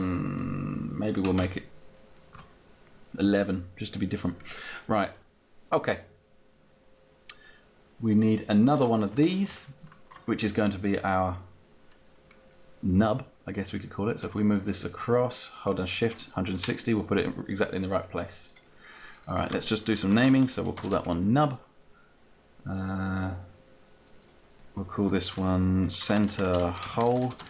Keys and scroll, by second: 2.4 Down, 19.6-21.0 typing, 25.5-27.4 typing.